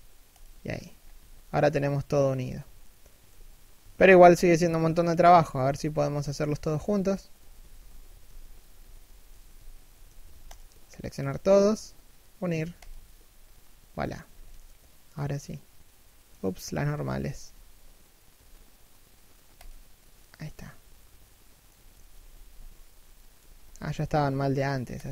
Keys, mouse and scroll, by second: 0.3 scroll down 1, 0.8 z, 1.0 middle click, 2.0 KP_3, 2.9 KP_1, 9.7 a, 10.1 alt+right click, 11.0 g, 14.3 middle click, 17.0 a, 17.9 ctrl+n, 19.8 middle click, 23.0 a, 23.9 ctrl+n.